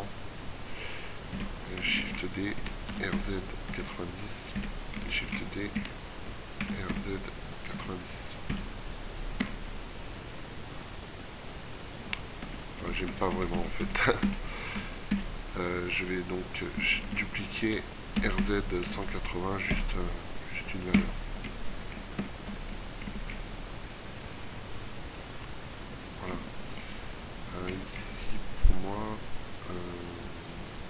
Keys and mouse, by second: 1.6 shift+d, 3.0 r, 5.1 shift+d, 6.7 r, 9.1 Tab, 12.5 Tab, 13.2-13.6 ctrl+z, 13.9 ctrl+z, 14.9 ctrl+z, 17.1 shift+d, 18.0 r, 21.0 Tab, 22.3 Tab, 27.6 middle click, 28.7 middle click, 29.9 middle click.